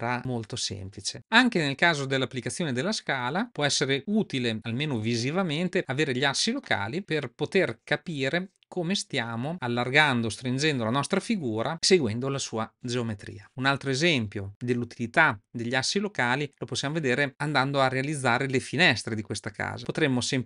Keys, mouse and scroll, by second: 6.9-7.5 middle drag, 8.9-10.3 drag.